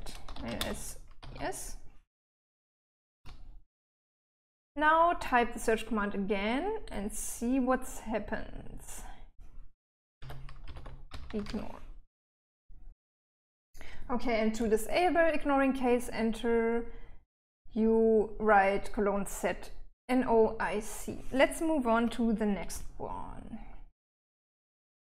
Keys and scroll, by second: 0.0-2.1 typing, 3.4 Return, 10.5-12.3 typing, 22.2 Escape, 23.0 j, 23.5 j, 23.6-24.8 j.